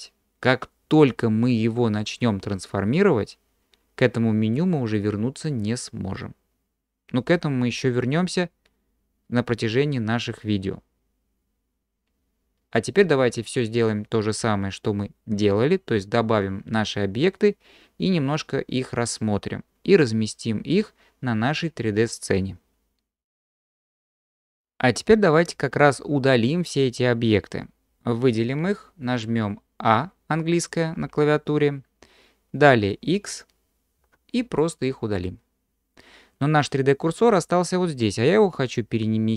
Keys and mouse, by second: 31.0 a, 34.0 x.